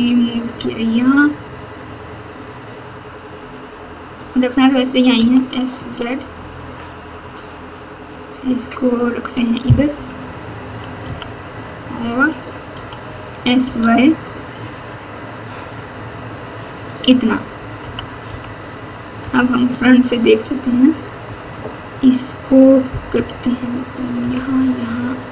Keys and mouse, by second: 5.1 s, 9.9 KP_1, 11.0 KP_3, 12.7 s, 17.8 KP_3, 18.2 KP_2, 19.1 KP_1, 21.5 KP_4, 23.1 KP_3, 24.2 KP_1.